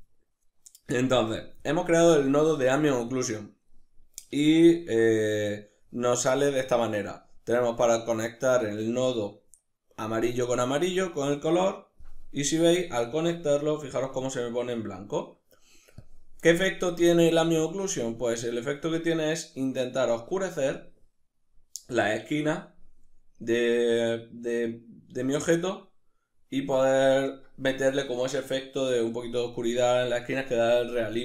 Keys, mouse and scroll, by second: 0.9-4.1 drag, 4.1-10.7 ctrl+middle drag, 10.7-15.2 drag, 15.2-15.6 middle drag, 15.6-31.2 drag.